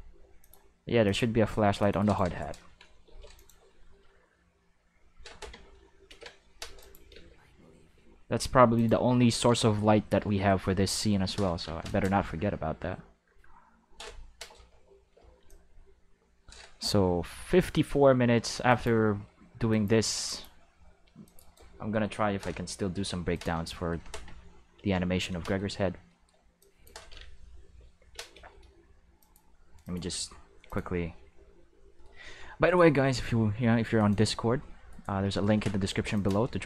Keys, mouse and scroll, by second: 0.4 click, 1.0 click, 1.8 click, 2.0 click, 2.0 right click, 3.0 x, 3.3 click, 6.0 ctrl+v, 6.8 click, 7.1 space, 7.9 space, 8.7 click, 11.8 click, 15.0 c, 15.4-17.6 drag, 18.6 click, 19.7 click, 20.2 click, 21.2 click, 21.4 right click, 22.9 x, 23.3 click, 24.7 ctrl+v, 25.5-26.2 shift+middle drag, 26.6 click, 28.3 c, 29.2 click, 29.8 click, 30.6 click, 32.6 right click, 33.0 c, 33.9 click, 34.9 right click, 35.8 x, 36.1 click.